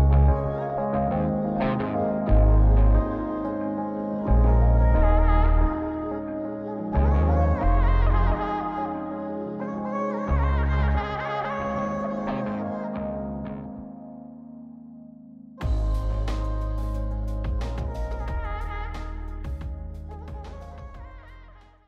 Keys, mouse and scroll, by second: 3.2 g, 13.3 click, 14.3 middle click, 15.1 g.